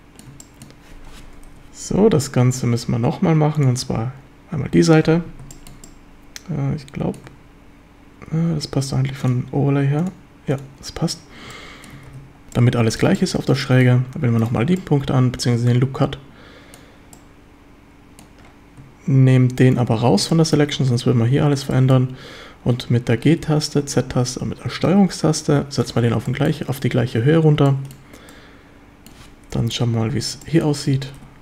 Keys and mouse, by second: 0.4 shift+middle drag, 1.5 KP_7, 3.6 click, 5.5 shift+middle click, 5.8-7.2 middle drag, 7.3 Tab, 9.2-11.0 drag, 11.5-11.9 middle drag, 12.1 ctrl+s, 12.6-13.0 middle drag, 13.1 shift+middle drag, 13.6 middle drag, 14.8-16.8 middle drag, 17.1-18.3 drag, 20.3 shift+drag, 21.7 shift+drag, 21.9 middle click, 23.3 g, 23.8 z, 25.8 ctrl+click, 26.3 shift+middle drag, 27.7 shift+middle click, 28.3-29.1 middle drag, 29.5 KP_7, 29.5 KP_8, 30.5 shift+click.